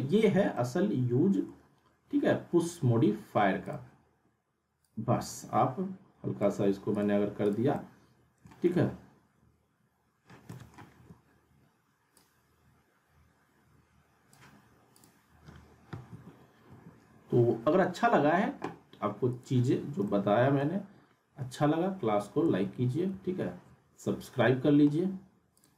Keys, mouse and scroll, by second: 0.5-3.6 alt+middle drag, 3.6-6.7 drag, 7.8-8.7 alt+middle drag, 11.0 r, 12.2-14.3 drag, 16.1 t, 16.7 t, 19.3 click, 20.0-20.7 alt+middle drag, 22.6 ctrl+z, 25.5 click.